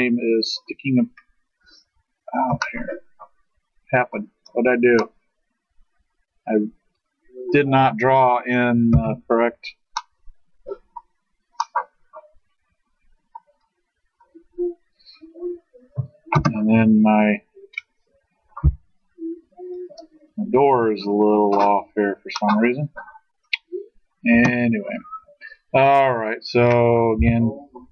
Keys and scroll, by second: 8.9 ctrl+z, 11.1 ctrl+z, 16.3 space, 18.6 s, 23.3 s, 24.3 space, 27.2 i.